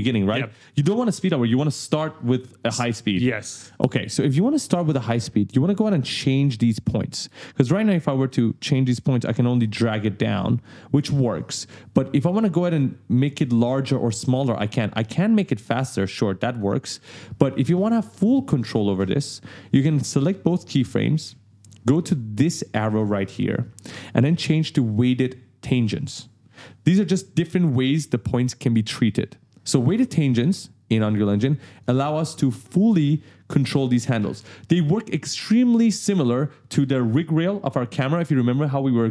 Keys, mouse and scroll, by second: 4.1 right click, 5.7 click, 7.1 shift+click, 8.2 click, 8.9 click, 10.9 ctrl+z, 12.9 click, 16.8 ctrl+z, 17.8 click, 19.8 shift+click, 22.8 click, 30.7 click, 31.7 click, 32.7 click.